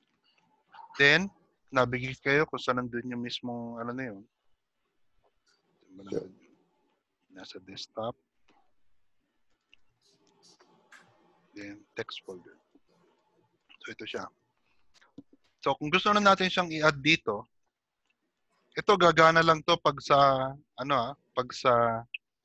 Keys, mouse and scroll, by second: 6.0 click, 21.1 click.